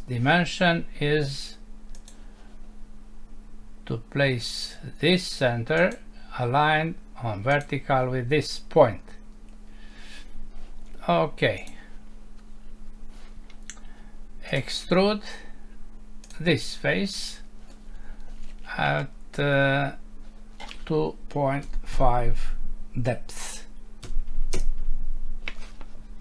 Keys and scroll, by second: 24.6 Return.